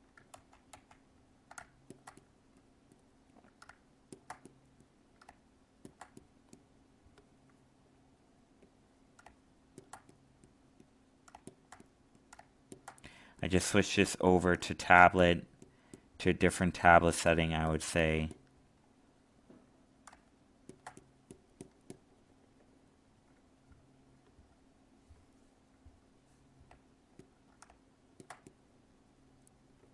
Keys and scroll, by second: 0.3 ctrl+z.